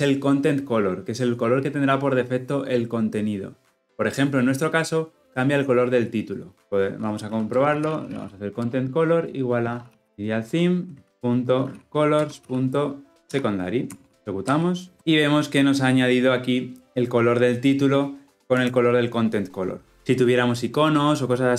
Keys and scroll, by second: 8.5 Return, 11.1 Return, 14.3 shift+F10, 19.9 ctrl+alt+Left.